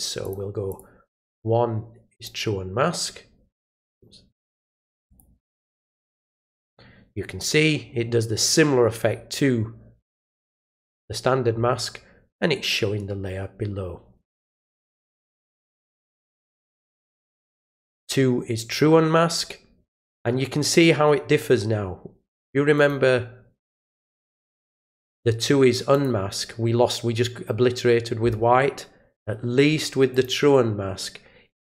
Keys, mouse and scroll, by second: 0.2 click, 0.7 click, 2.1 click, 3.9 click, 5.1 click, 6.0 click, 15.2 click, 16.8 click, 17.8 click, 22.7 click, 24.6 click, 25.9 click, 30.1 click.